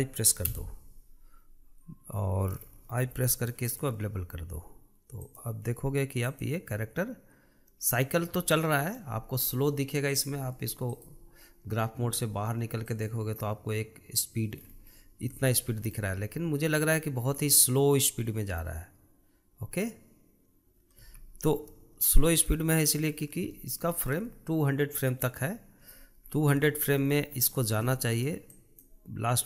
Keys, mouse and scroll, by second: 1.0 i, 3.5 i, 5.7-9.1 drag, 9.1-10.7 shift+middle drag, 10.7-11.8 drag, 13.6 click, 15.2-15.8 scroll up 5, 16.1-21.7 shift+middle drag, 21.7 space, 22.8 click, 23.6-24.0 scroll down 2, 24.0-26.4 shift+middle drag, 26.4-27.2 scroll down 5, 27.2-29.0 shift+middle drag, 29.0-29.4 drag.